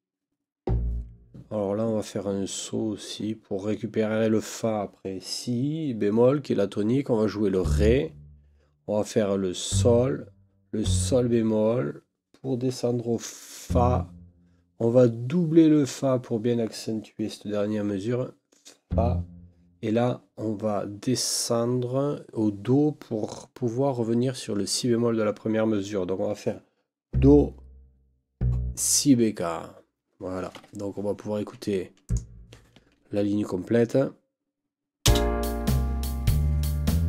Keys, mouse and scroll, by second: 30.5 Escape, 32.0 click, 35.0 space.